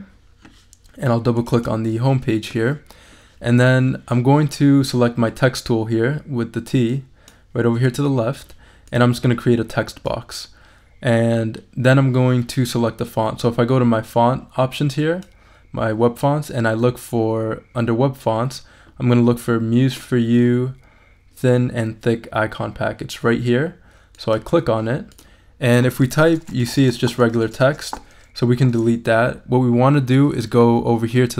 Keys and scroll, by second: 25.9-27.8 typing, 27.8 super+a, 28.7 super+BackSpace.